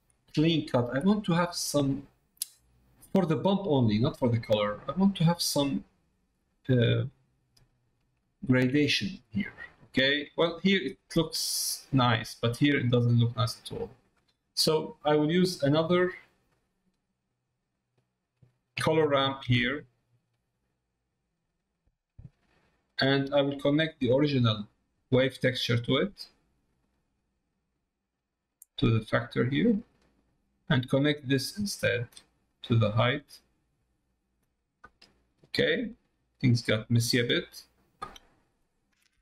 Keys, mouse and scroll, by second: 0.3 ctrl+middle click, 7.8 middle click, 8.3 shift+middle click, 8.8 middle click, 10.0 middle click, 13.3 middle click, 14.8 middle click, 15.7 middle click, 16.4 click, 17.7 click, 23.3 middle click, 25.3 middle click, 26.2 middle click, 27.4-29.6 drag, 30.0 middle click, 31.6-33.7 drag, 34.6 middle click, 35.4-37.1 drag, 37.4 middle click.